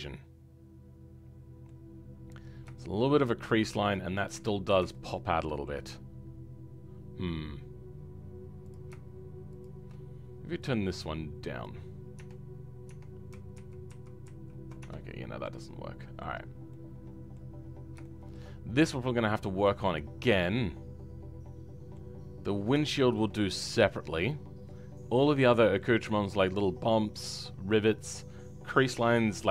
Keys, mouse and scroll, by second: 4.3 Tab, 4.6 scroll up 2, 4.9-5.9 shift+middle drag, 5.9-8.5 scroll up 2, 8.7 click, 12.8 Tab, 13.5 ctrl+z, 13.8 ctrl+z, 14.7 Tab, 15.1-15.4 scroll down 2, 15.4-16.4 middle drag, 16.4-16.7 scroll down 4, 16.7 middle click, 17.5-18.0 scroll up 5, 18.0-19.0 shift+middle drag, 19.0-19.6 scroll down 9, 19.6-22.1 middle drag, 22.1-22.8 scroll up 4, 22.8-24.5 shift+middle drag, 24.5-25.2 scroll down 4, 25.2-29.5 middle drag.